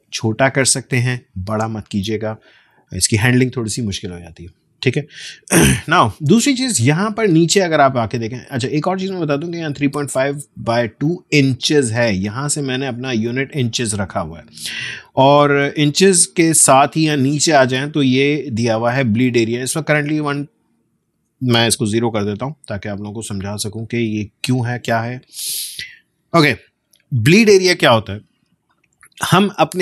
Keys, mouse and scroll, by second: 8.7-11.5 drag, 16.3 click, 20.2-21.8 drag, 21.8 0, 23.3 click.